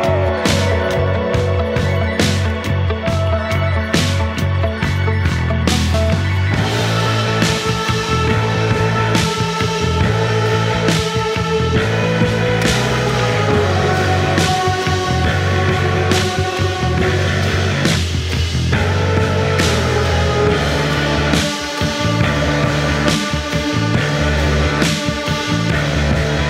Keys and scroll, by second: 2.4 F1, 4.8 ctrl+d, 4.9 Escape, 7.7 F1, 8.4 1, 15.5 F2.